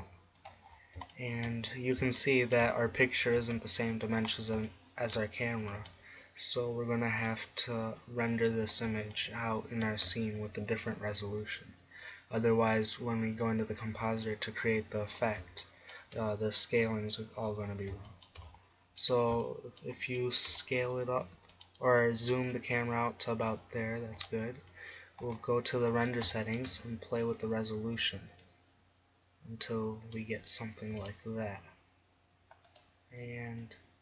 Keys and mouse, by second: 1.3 click, 2.3 click, 2.5 click, 4.2 click, 5.7 g, 21.3 g, 23.6-26.7 drag, 24.8 g, 27.4-30.4 drag, 30.9 g, 32.8-34.0 drag.